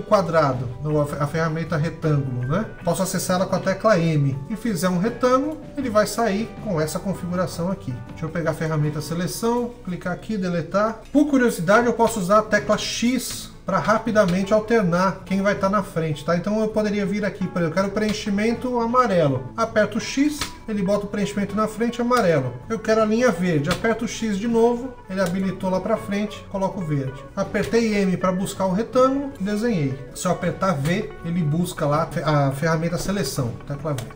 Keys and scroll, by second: 11.8-14.0 typing, 17.8 x, 20.1 x, 23.4 x, 27.4 m, 30.6 v.